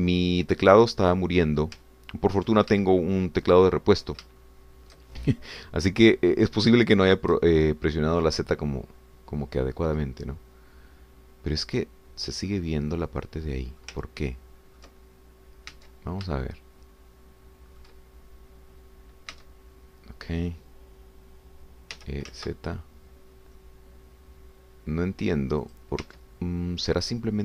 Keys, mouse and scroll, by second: 2.8 ctrl+click, 3.9-5.2 ctrl+shift+drag, 5.4 shift+click, 6.6 scroll down 1, 7.2 click, 7.8 shift+click, 8.9-11.3 drag, 11.3 scroll up 1, 13.5-15.0 drag, 15.0 ctrl+click, 16.8 Tab, 17.4-19.0 shift+drag, 20.4 Tab, 23.0 e, 23.3 z, 26.6 click, 27.0 Tab.